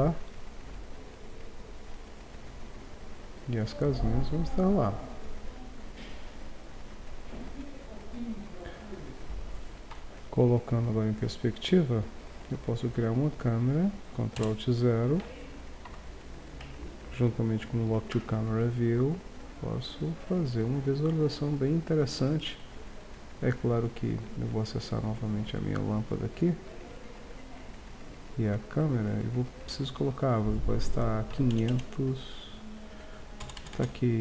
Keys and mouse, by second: 1.4 Tab, 8.9-9.9 middle drag, 9.9 KP_5, 14.4 ctrl+alt+KP_0, 15.8 Home, 18.5 middle drag, 19.8 middle click, 24.5-26.4 drag, 27.0-27.5 right drag, 31.7 KP_0, 33.6 BackSpace, 33.8 BackSpace.